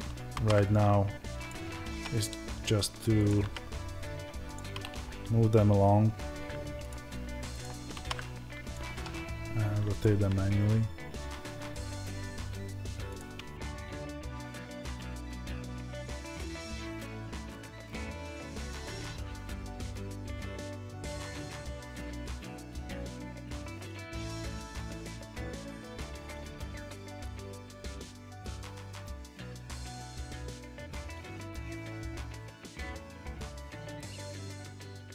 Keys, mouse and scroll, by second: 1.4 click, 3.2 click, 7.8 alt+d, 8.6 click, 13.9 alt+d, 14.4 click, 14.5 s, 14.8 click, 14.9 s, 17.0 click, 17.0 g, 17.4 click, 17.5 alt+d, 17.9 click, 18.3 click, 18.4 g, 19.6 middle click, 20.4 click, 21.7 Tab, 24.7 middle click, 24.8 Tab, 25.0 click, 26.3-28.3 middle drag, 27.5 KP_1, 27.7 scroll up 1, 28.3 click, 29.6 ctrl+z, 33.1-34.5 middle drag, 33.5 KP_7, 33.7 scroll down 1, 34.5 click, 34.6-35.1 middle drag, 34.8 scroll up 1, 35.0-35.1 scroll down 1.